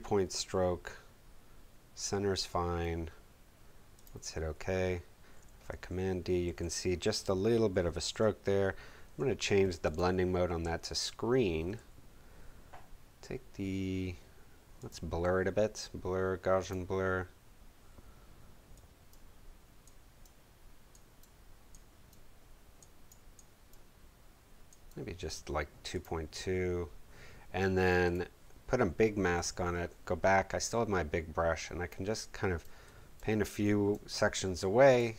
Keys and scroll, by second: 5.5 super+d, 6.5 super+v, 29.3 b.